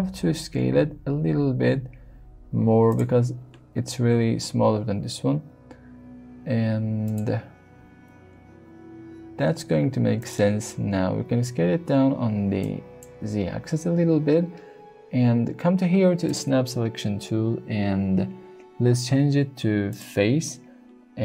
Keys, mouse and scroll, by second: 5.3 g, 7.0 click, 9.2 s, 10.2 click, 10.8 s, 12.6 click, 16.2-21.2 drag.